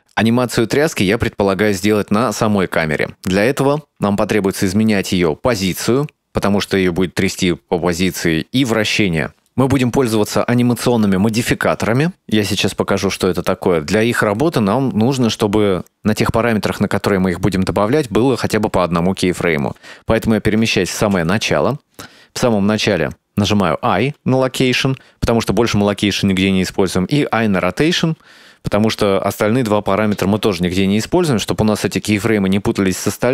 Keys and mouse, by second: 9.4 ctrl+middle click, 11.5 click, 21.2 shift+Left.